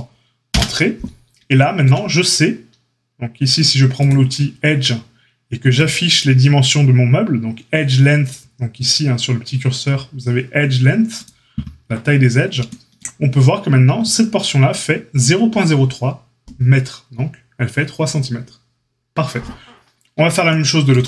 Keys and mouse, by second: 3.9-14.1 drag, 14.1-21.0 middle drag.